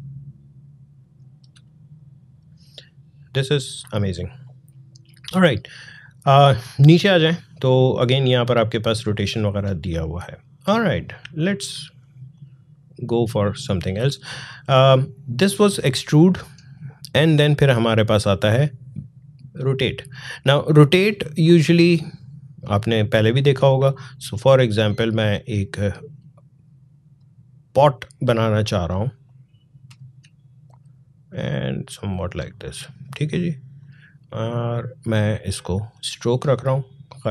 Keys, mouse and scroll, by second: 0.1-1.4 drag, 1.4 space, 1.7 click, 1.9 space, 2.6 click, 2.7 space, 5.6 scroll down 1, 9.7-10.4 scroll down 2, 10.9-13.8 drag, 22.5-29.1 drag, 29.1-31.8 drag, 36.4 alt+scroll up 1.